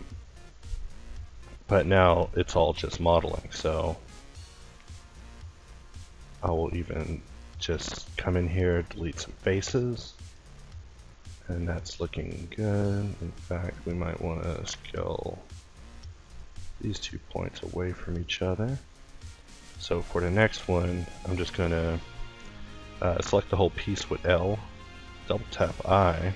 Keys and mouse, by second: 0.3 g, 1.3 s, 3.0 a, 8.3 x, 11.0 x, 12.2 ctrl+t, 16.2 s, 17.4 Tab, 18.4 Tab, 19.7-21.2 middle drag, 22.1 a, 22.7 l, 23.6 l, 24.7 i.